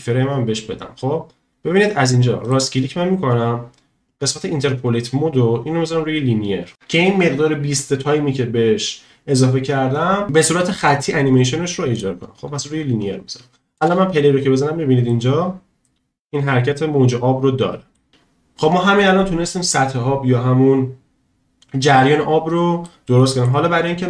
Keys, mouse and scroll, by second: 2.5-12.0 drag, 13.8 space, 15.1-18.0 middle drag, 18.3 space, 22.9 middle click.